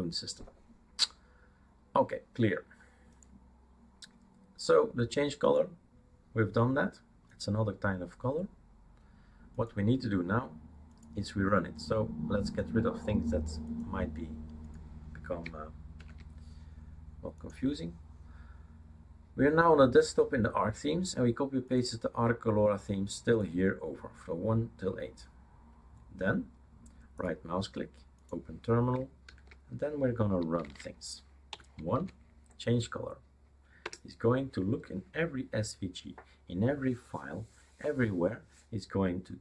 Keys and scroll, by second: 16.0 super+4, 29.3 super+6, 30.7-31.5 typing, 32.0 Tab, 33.9 Return.